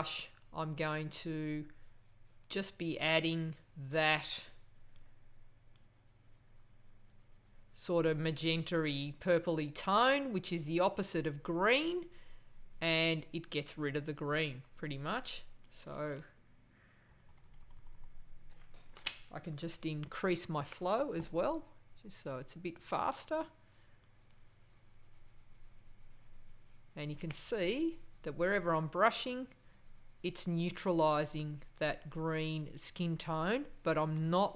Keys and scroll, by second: 17.1 ].